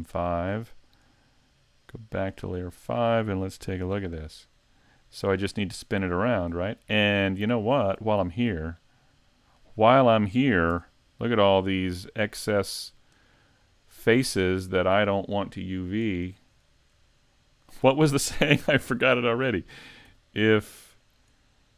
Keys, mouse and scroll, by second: 2.3 click, 2.7-3.8 scroll up 1, 3.8 KP_Decimal, 4.3-4.9 scroll down 1, 4.9 middle click, 4.9 scroll down 2, 6.5-7.0 scroll up 1, 7.0-7.4 scroll up 6, 7.6 shift+middle click, 8.5 middle click, 10.7 Tab, 11.5 middle click, 12.6 right click, 13.2 shift+right click, 13.8 shift+right click, 14.2-14.6 scroll down 3, 14.6 shift+middle click, 15.1-15.7 scroll up 5, 16.0 shift+right click, 16.4 shift+right click, 16.7 scroll down 1, 17.1 shift+middle click, 20.1 x, 21.5-21.7 scroll down 1.